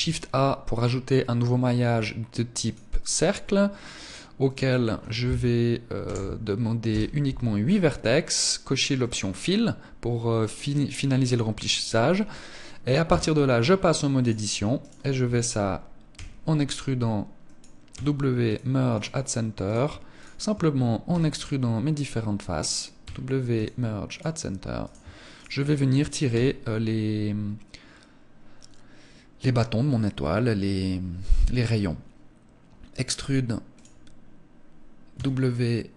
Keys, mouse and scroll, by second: 3.8 click, 8.4 click, 12.5 Tab, 13.6 right click, 14.2 shift+right click, 15.6 e, 17.0 click, 17.3 w, 19.0 right click, 19.6 shift+right click, 20.5 e, 22.1 click, 22.4 w, 24.2 right click, 24.8 shift+right click, 25.7 e, 33.2 click, 34.6 w.